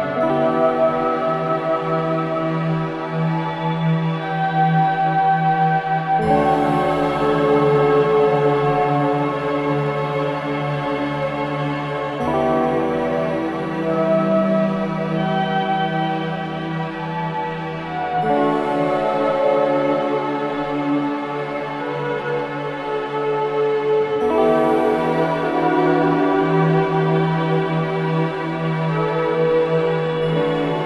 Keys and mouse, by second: 1.2 click, 2.0-2.9 typing, 5.5 click, 6.3 ctrl+alt+click, 7.1 click, 8.0-8.4 typing, 9.5-12.1 drag, 13.6-14.9 ctrl+alt+drag, 14.7 ctrl+s, 16.3 drag, 18.0 ctrl+alt+click, 18.4-20.5 alt+drag, 20.3 1, 21.6-22.2 ctrl+alt+drag, 23.4-24.6 ctrl+alt+drag, 25.0-26.1 drag, 26.4-29.0 drag, 29.5-30.3 typing.